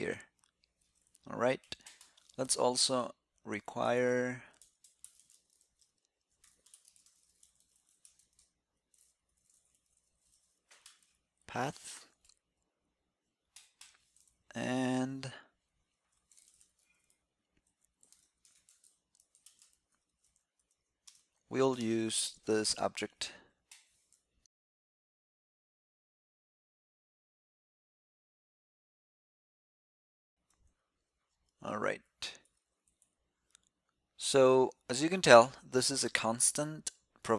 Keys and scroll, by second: 22.4 alt+c, 23.7 alt+c, 31.6 super+s, 34.9 alt+shift+Left, 35.1 alt+shift+Left, 36.0 alt+shift+Left, 36.4 alt+shift+Left.